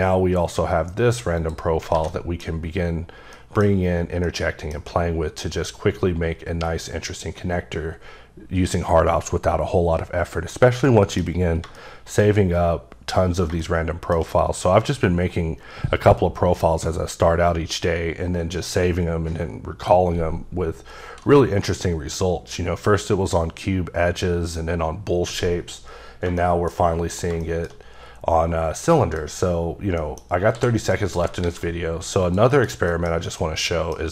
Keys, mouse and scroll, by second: 1.4 click, 1.7 scroll down 3, 2.0 a, 2.1 middle click, 2.5 scroll down 3, 3.4 middle click, 4.3 middle click, 10.6 scroll down 2, 10.9 middle click, 25.7-26.3 scroll down 2, 26.4 shift+middle click, 26.8 scroll up 2, 27.1 click, 27.4 shift+middle click, 28.0-28.7 scroll up 1, 28.9 middle click, 30.0 middle click, 30.5 h, 31.0 middle click, 31.4 shift+a, 32.2 click, 32.5 KP_Decimal, 32.9 middle click, 33.1 scroll down 3, 33.4 scroll up 1, 33.4 middle click.